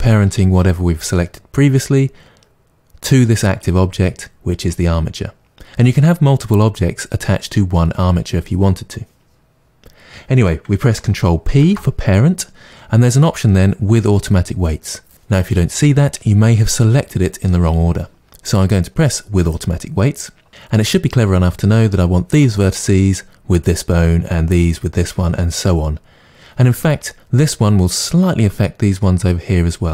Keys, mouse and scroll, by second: 11.6 ctrl+p.